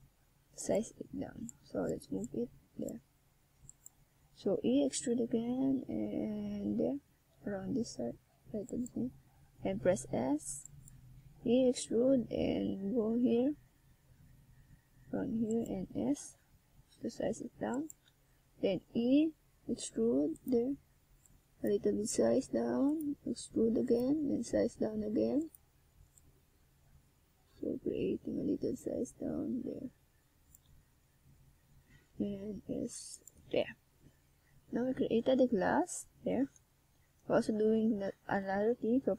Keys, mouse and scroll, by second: 0.4 r, 2.0 click, 2.4 s, 3.0 click, 3.3 middle click, 6.3 click, 7.9 click, 9.0 KP_0, 11.4 click, 13.1 right click, 14.2 click, 15.4 click, 16.6 right click, 17.2 shift+right click, 18.4 right click, 19.4 shift+right click, 20.3 middle click, 21.2 click, 22.4 KP_0, 24.2 middle click, 25.4 middle click, 26.3 ctrl+alt+KP_0, 28.4 right click, 29.2 right click, 32.1 click, 33.3 KP_1, 37.3 shift+s.